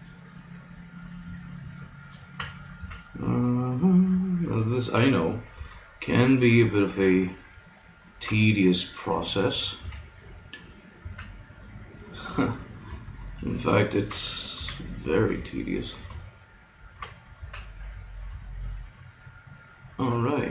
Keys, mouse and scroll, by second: 2.1-3.8 right drag, 2.7 s, 4.5-6.1 right drag, 5.5 s, 7.8 right click, 9.8 KP_1, 11.0 s, 13.7-15.7 drag, 14.6 s, 16.6-18.3 middle drag, 17.3 s.